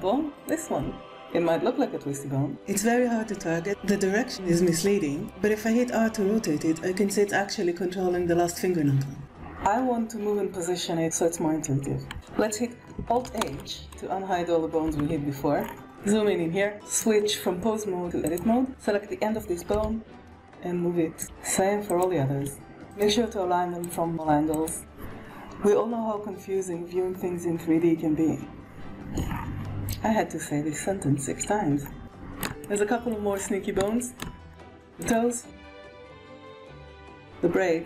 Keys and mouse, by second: 0.2 click, 4.7 r, 12.0 Tab, 13.2 alt+h, 14.8 alt+a, 14.9 alt+h, 16.0 shift+click, 16.6-18.2 drag, 19.6 g, 21.3 middle click, 21.6 click, 22.0-30.0 typing, 22.7 click, 23.4 click, 24.0 click, 24.5 click, 25.2 click, 26.1 click, 26.1 right click, 26.3 click, 26.3 right click, 27.6 shift+click, 28.8 click, 29.0 click, 29.6 click, 31.2 click, 31.3 middle click, 31.3 right click, 31.4 g, 31.9 shift+click, 32.5 click, 32.5 middle click, 32.5 right click, 33.7 shift+click, 34.9 click, 35.6 g, 36.3 click, 36.4 g, 36.6 KP_1, 37.1 click, 37.8 shift+click.